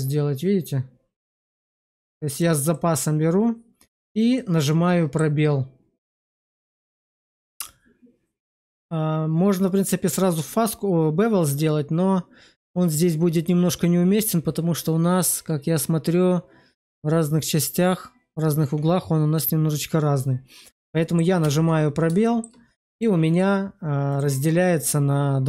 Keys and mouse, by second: 2.7 middle click, 4.3 middle click, 6.5 middle click, 21.3 space, 22.1 shift+drag, 23.2 click.